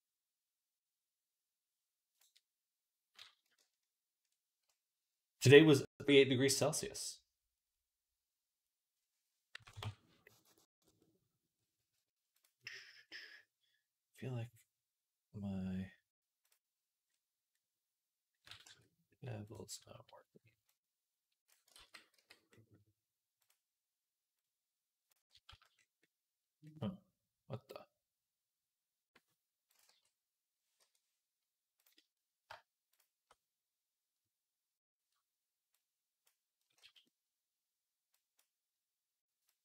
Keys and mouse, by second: 10.5 middle click, 11.8 click, 11.9 middle click, 11.9-21.5 right drag, 16.3 click, 16.3 middle click, 18.5 Tab, 20.5-21.5 drag, 20.5-21.5 middle drag, 21.6 ctrl+z, 23.3 right click, 25.3 z, 26.5-29.6 drag, 26.5 middle click, 26.5 right click, 28.2-29.6 middle drag, 28.2-37.2 right drag, 29.7 g, 31.6 click, 31.6 middle click, 32.8 shift+click, 32.8 shift+middle click, 35.5-37.2 drag, 35.5-37.2 middle drag, 36.6 z.